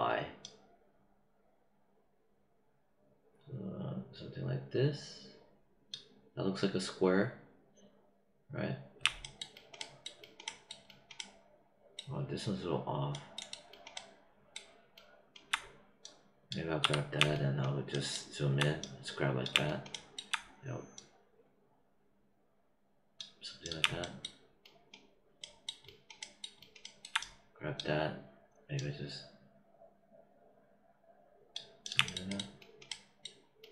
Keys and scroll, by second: 16.7 w.